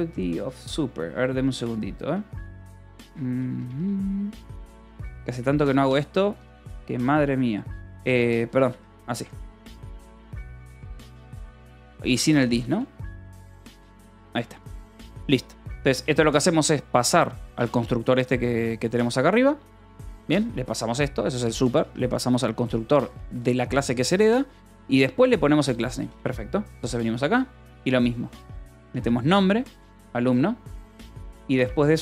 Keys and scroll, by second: 0.1 j, 0.5 k, 1.3 j, 2.0 h, 3.3-6.0 typing, 7.6-15.1 typing, 9.4 Escape, 10.6 Escape, 13.4 Escape, 16.3 shift+v, 16.8 Escape, 17.9-20.8 typing, 21.1 Escape, 22.5 k, 23.1 j, 23.9 Escape, 24.4 j, 24.9 j, 26.2-27.1 typing, 28.2-31.4 typing.